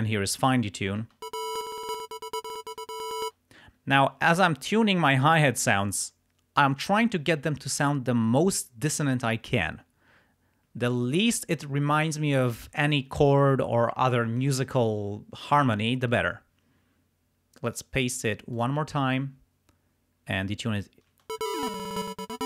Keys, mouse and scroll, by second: 0.5 click, 1.1 space, 2.0 click, 3.3 space, 17.7 click, 18.5 click, 21.2 space, 21.3-22.4 drag.